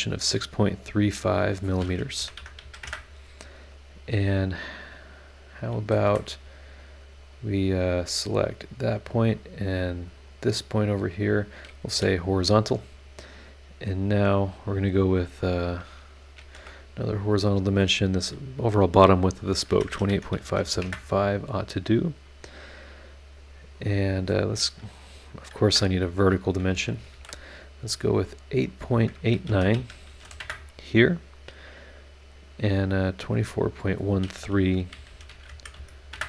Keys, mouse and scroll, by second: 1.0 click, 2.1 KP_6, 2.4 KP_Decimal, 2.6 KP_3, 2.7 KP_5, 2.8 KP_Enter, 6.0 Escape, 6.8 click, 7.2 click, 8.3 click, 9.1 click, 9.8 click, 10.2 click, 11.3 click, 11.9 h, 16.4 shift+h, 17.4 click, 19.7-20.7 typing, 20.8 KP_Enter, 23.7 click, 25.6 KP_Enter, 26.7 KP_Enter, 27.1 shift+v, 28.6 click, 29.5 KP_8, 29.7 KP_Decimal, 30.1 KP_8, 30.2 KP_9, 30.4 KP_Enter, 33.7 click, 34.9-35.7 typing, 36.1 KP_Enter.